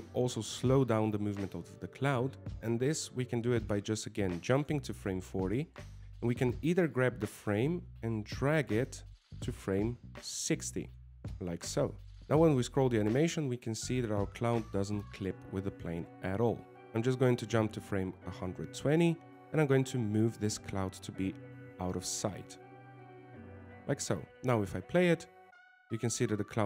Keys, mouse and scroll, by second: 1.2 middle click, 5.6 click, 7.5 right click, 8.6 right click, 16.8 click, 18.5 click, 21.5 g, 25.0 click, 26.0 alt+a.